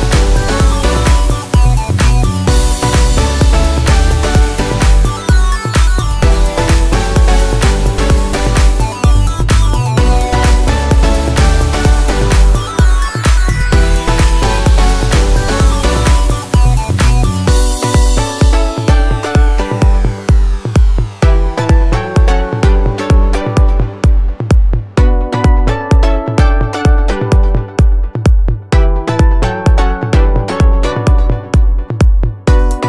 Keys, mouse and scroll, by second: 4.6 double click, 14.5 Delete, 17.1 ctrl+d, 22.5 ctrl+a, 28.9-30.3 typing.